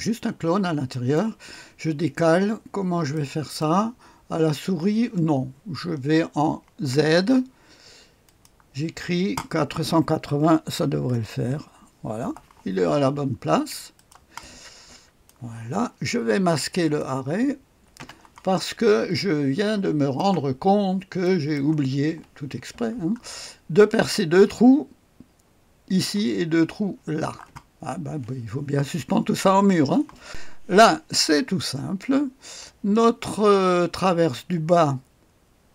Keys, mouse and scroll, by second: 0.9 click, 1.6 click, 2.6-3.1 scroll down 1, 3.1-4.2 right drag, 8.2 click, 10.3 KP_4, 10.7 KP_8, 11.1 KP_0, 13.9-15.9 drag, 16.8 click, 18.0 space, 19.1-20.7 drag, 20.8-21.5 scroll up 1, 21.2 middle click, 21.5 middle click, 23.0-23.6 scroll down 1, 30.3 click.